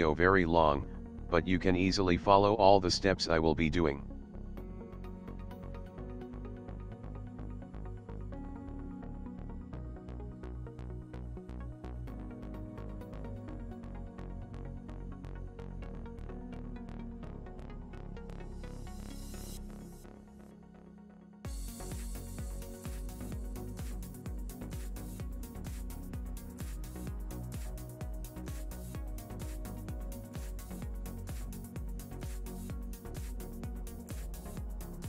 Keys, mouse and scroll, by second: 5.7 g, 9.9 ctrl+click, 10.1 ctrl+middle click, 10.7 ctrl+middle click, 12.1 s, 14.3 middle click, 15.3 middle click, 16.6 g, 20.1 middle click, 21.2 click, 22.0 click, 24.0 click, 25.3 click, 27.2 click, 29.9 ctrl+middle click, 31.0 shift+middle click, 31.5 middle click, 33.5 click.